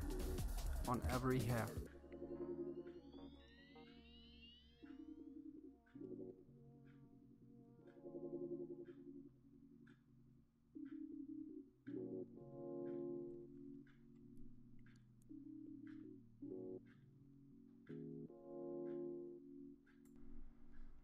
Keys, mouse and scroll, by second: 0.4 shift+middle click, 1.0 click, 2.1 middle click, 2.2 KP_3, 2.4 shift+middle click, 2.9 click, 4.2 click, 4.6 click, 5.3 click, 5.8 click, 6.9 middle click, 7.0 KP_3, 7.4 shift+middle click, 7.9 click, 9.3 click, 9.4 shift+middle click, 9.9 click, 11.1 click, 11.5 click, 12.6 click, 12.9 click, 13.5 click, 13.8 click, 14.5 middle click, 14.9 KP_1, 16.4 ctrl+z, 16.8 middle click, 17.5 middle click, 17.9 click, 19.1 middle click, 19.9 click, 20.0-21.0 middle drag.